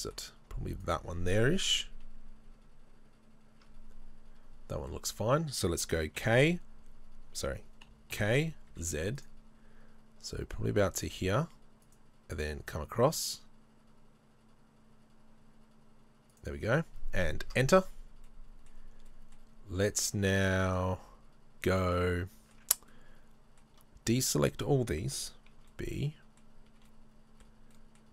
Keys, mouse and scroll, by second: 0.8 right click, 1.7 KP_3, 2.3 KP_1, 4.5 scroll down 1, 4.9-28.1 shift+middle drag, 6.2 l, 17.5 KP_Enter, 19.8 z, 25.6 b.